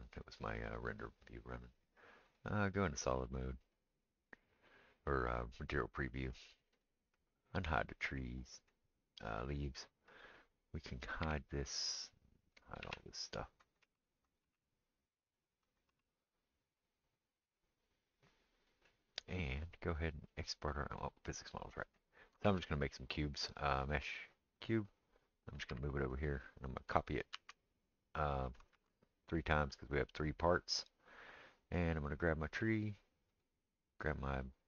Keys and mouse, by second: 2.4-10.1 middle drag, 6.7 click, 10.1 click, 10.2-12.6 middle drag, 11.2 h, 12.6-19.5 drag, 12.8 h, 13.8 h, 14.4 h, 15.9 h, 19.5-31.6 middle drag, 22.4 shift+a, 25.7 g, 27.3 shift+d, 28.7 shift+d, 31.6 click, 31.7-33.3 middle drag, 33.3 shift+click, 33.4-34.6 shift+middle drag.